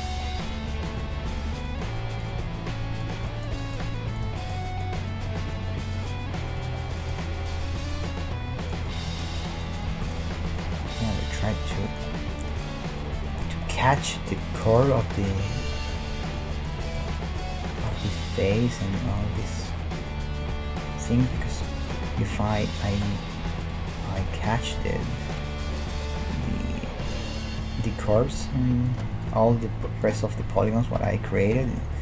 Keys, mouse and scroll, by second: 0.2-2.1 middle drag, 0.7 g, 2.2-3.6 right drag, 2.3 g, 3.3 middle click, 5.3 g, 6.4-14.4 middle drag, 9.9-13.3 right drag, 10.2 g, 12.0 g, 14.4-17.3 right drag, 16.0 g, 17.3 middle click, 17.7-23.0 right drag, 17.9 g, 18.6 middle click, 19.2 g, 21.5-24.7 middle drag, 21.8 g, 23.6-26.3 right drag, 23.8 g, 24.8-26.4 middle drag, 25.0 g, 26.4-32.0 right drag, 26.6 g, 27.8 g, 28.5 g, 29.5 g, 30.8 g, 31.6-32.0 middle drag.